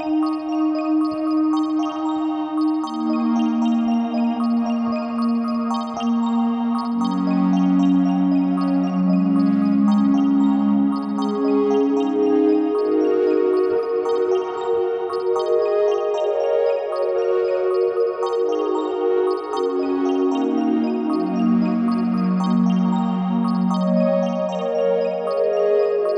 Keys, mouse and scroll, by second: 10.0-13.2 drag, 12.5 s, 13.6 KP_1, 14.8 s, 15.8 click, 16.9 click, 18.3 g, 20.7 click, 23.5 s, 25.6 click.